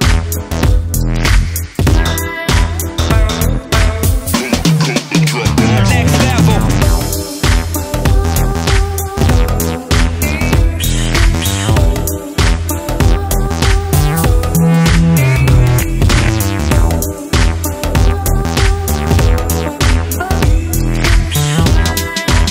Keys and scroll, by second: 17.7 Right.